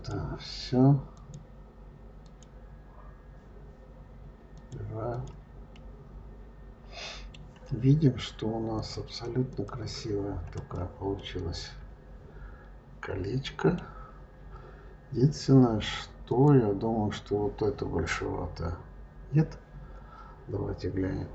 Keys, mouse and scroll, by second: 1.0 click, 2.1 click, 4.4 click, 4.9 click, 5.6-8.6 middle drag, 8.6-10.6 drag, 11.0-13.7 middle drag, 13.7-14.5 scroll down 4, 16.1 click.